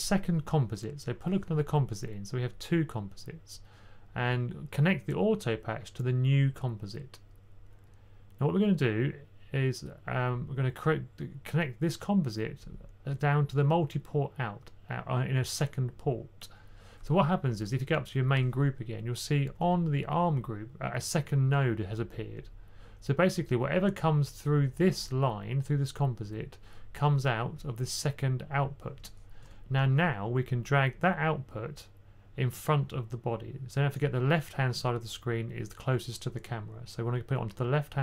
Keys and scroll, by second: 19.3-19.9 typing, 29.6 1.